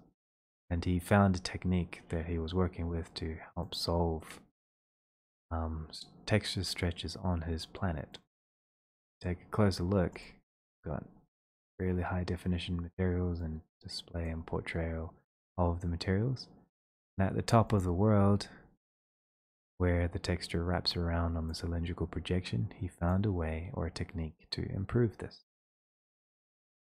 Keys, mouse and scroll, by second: 3.8 ctrl+click, 8.2 click, 9.8 middle click, 10.2 click, 11.1 ctrl+scroll, 16.3 ctrl+scroll, 16.8 ctrl+scroll, 17.0 click, 17.1 click, 17.8 click, 18.3-18.7 ctrl+scroll, 19.1-19.8 ctrl+scroll, 24.4 click, 24.4 click.